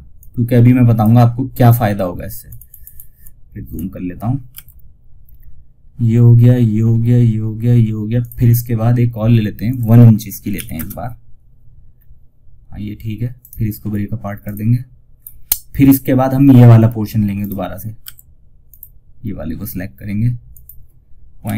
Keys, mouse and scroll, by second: 1.7-2.2 ctrl+scroll up 1, 3.0-3.5 scroll up 1, 7.5 click, 11.2 scroll down 1, 12.7 right click, 13.7 click, 14.4 scroll up 1, 16.7 click.